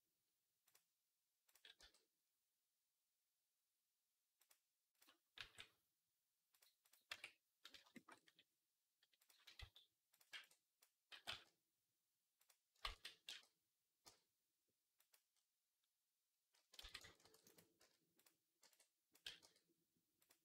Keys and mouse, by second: 0.5 g, 1.3 click, 1.6 g, 5.2 g, 6.7 click, 6.9 Tab, 7.7 shift+middle click, 8.0-9.1 middle drag, 9.1 click, 9.4 z, 10.0-12.2 middle drag, 10.2 b, 11.0 g, 12.7 ctrl+z, 13.1 g, 16.6 ctrl+z, 17.0 ctrl+r, 17.6 z, 18.4 b, 19.1 g, 20.0-20.4 drag, 20.3 z.